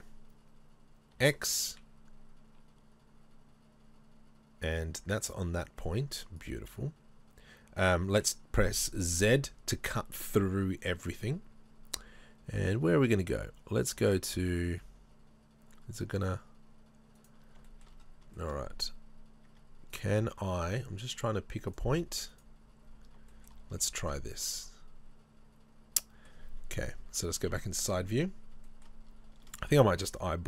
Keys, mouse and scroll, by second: 1.2 k, 5.2-17.3 middle drag, 17.3 right click, 17.7-19.9 shift+middle drag, 18.0 scroll up 1, 18.7 scroll up 1, 19.5 Tab, 20.0 right click, 20.4 Tab, 21.7 click, 22.3 right click, 22.8-23.2 scroll down 1, 23.3-29.0 shift+middle drag, 23.5 shift+scroll down 1, 24.2-24.6 scroll down 1, 27.2 KP_3.